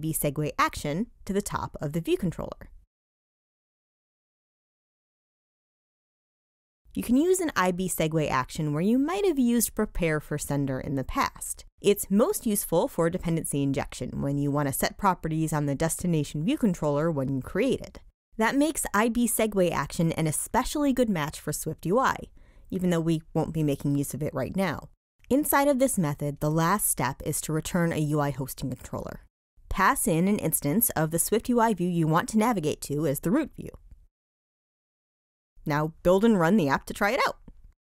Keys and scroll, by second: 35.4 super+r.